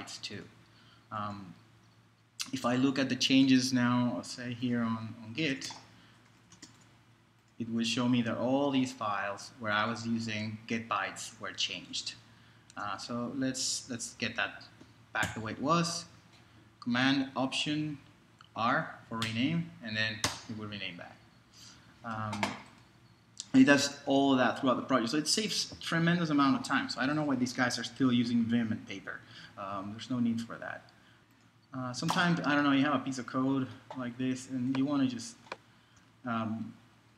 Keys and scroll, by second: 5.1-7.1 typing, 12.7 super+Tab, 15.2 alt+super+r, 17.8 Right, 19.2 BackSpace, 20.2 Return.